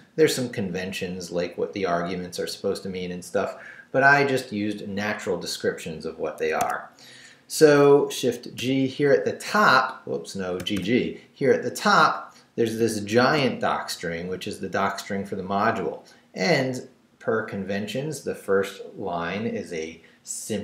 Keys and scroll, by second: 6.4 Escape, 8.6 shift+g, 10.6 g, 13.2 shift+v, 13.6 shift+Down, 14.4 Down, 15.1 Up.